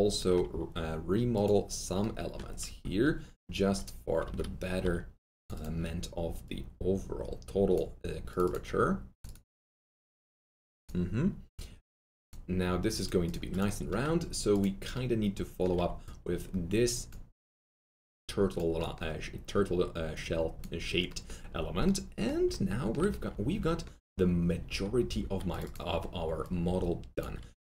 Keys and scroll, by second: 0.0-0.1 typing, 2.6 F3, 4.2 F3, 4.5-5.3 typing.